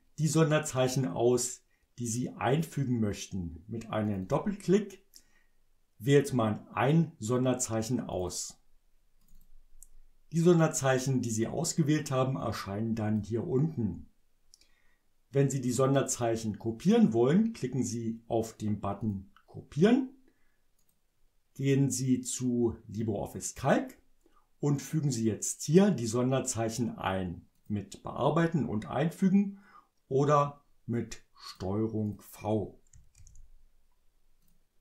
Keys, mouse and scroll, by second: 4.1 click, 8.1 click, 9.2 click, 12.4 click, 19.0 click, 20.8 click, 23.6 click, 27.5 click, 31.3 click, 32.0 click, 33.1 ctrl+v, 34.4 click.